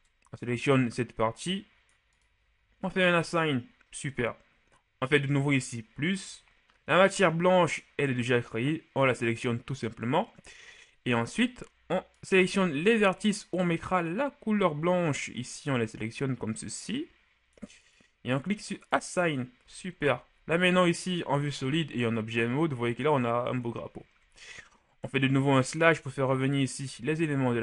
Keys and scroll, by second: 20.1 shift+Tab, 20.5 shift+z, 21.5 z, 25.0 KP_Divide.